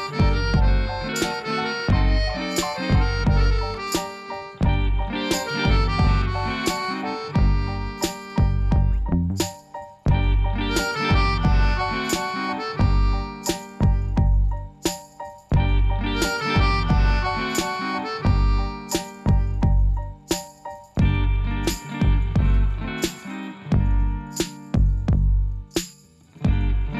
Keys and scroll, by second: 3.4 i, 10.5 ctrl++, 21.2 Tab, 22.7 Tab.